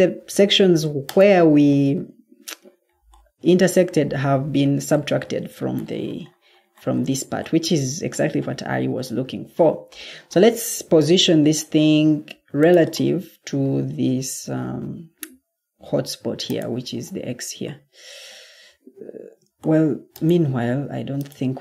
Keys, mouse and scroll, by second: 11.2 ctrl+d, 18.9 Escape, 19.1 Escape, 20.8 Escape.